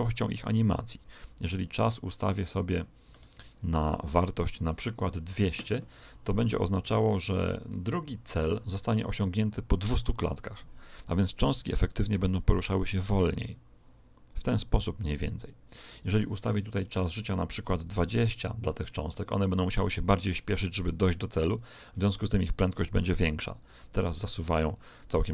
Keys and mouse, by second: 0.1 click, 4.2 right click, 5.3 click, 7.0 0, 11.4 click, 12.1 alt+a, 15.9 Escape, 16.9 click, 22.9 alt+a.